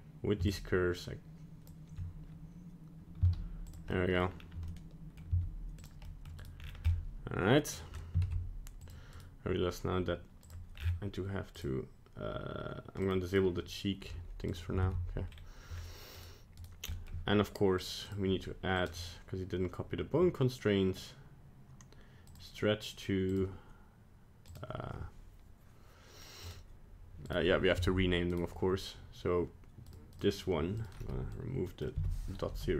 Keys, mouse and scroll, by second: 0.4 shift+click, 3.1 z, 3.8 middle click, 4.2 scroll down 2, 4.7 middle click, 5.2 z, 6.0 middle click, 6.2 middle click, 6.4 right click, 6.5 scroll down 4, 6.9 middle click, 7.9 scroll up 1, 8.2 ctrl+Tab, 9.1 right click, 10.4 click, 10.7-11.1 scroll down 9, 11.5 click, 13.0 click, 13.3 click, 14.4 right click, 14.8 ctrl+Tab, 15.2-16.0 scroll up 3, 16.1 right click, 16.6 right click, 16.9 middle click, 17.7 click, 18.6 click, 18.7 click, 23.2 click, 26.4 click, 27.8 Tab, 28.2 right click, 29.8 click, 30.1 click, 30.8 click.